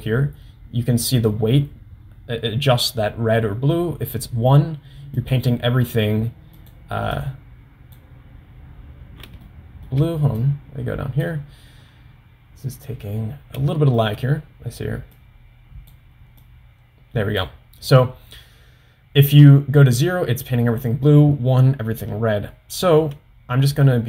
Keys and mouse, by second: 5.5 click, 6.8 click, 7.3 click, 9.5 shift+middle click, 10.6 click, 13.8 shift+middle click, 15.3 click, 16.6-17.8 drag, 23.2 middle click.